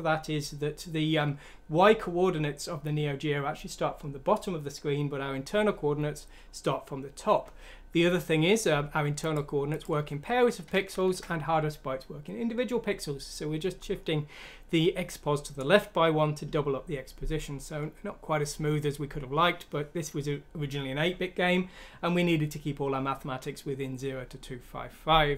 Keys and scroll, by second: 10.9 Home.